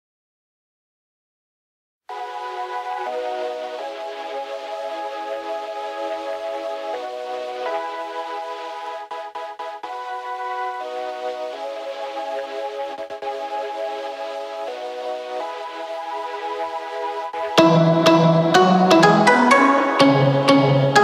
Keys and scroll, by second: 7.6 Escape, 10.1 t.